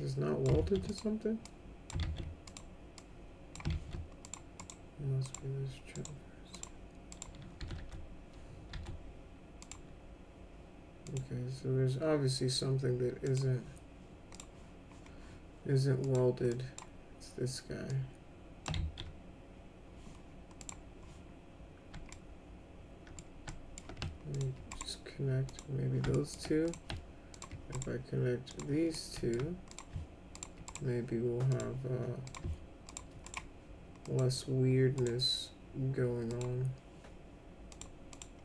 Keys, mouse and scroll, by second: 0.6 ctrl+z, 0.9 click, 1.4 click, 2.0 ctrl+z, 2.5 click, 3.0 click, 3.7 ctrl+z, 4.2 click, 4.6 right click, 5.2 click, 5.9 right click, 6.6 click, 7.1 click, 7.6 s, 7.8 s, 8.7 s, 9.6 click, 11.0 click, 13.2 click, 14.3 click, 16.0 click, 16.5 drag, 17.9 click, 18.7 ctrl+z, 20.6 click, 22.1-23.2 alt+middle drag, 23.5 alt+middle click, 24.3 ctrl+click, 24.7 right click, 25.5 click, 26.1 alt+middle click, 26.7 click, 27.3 ctrl+click, 27.7 right click, 28.5 click, 29.0 alt+middle click, 29.7 click, 30.4 ctrl+click, 30.7 right click, 31.5 click, 32.3 click, 32.9 ctrl+click, 33.3 right click, 34.0 click, 35.0 right click, 36.3 click, 37.7 click, 38.1 click.